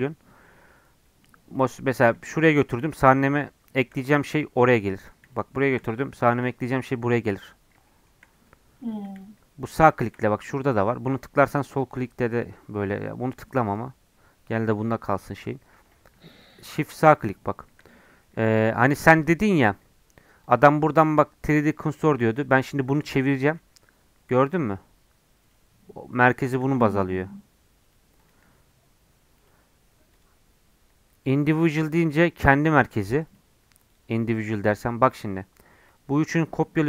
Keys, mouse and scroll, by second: 1.9 shift+a, 2.8 shift+a, 5.4 shift+right click, 5.6 shift+a, 7.9 shift+middle click, 8.4 scroll down 4, 8.5 middle click, 9.2-10.6 shift+right drag, 10.6-15.9 drag, 15.9 shift+right click, 16.7-17.9 shift+right drag, 17.9-20.4 middle drag, 20.4-21.9 drag, 21.9 scroll down 1, 22.4-22.9 scroll up 1, 22.9 click, 23.6 r, 26.5 click, 26.8 r, 28.2 click, 28.4 r, 30.1-31.9 drag, 31.9 r, 33.9-35.3 drag, 35.3 scroll up 1, 35.9-36.8 drag.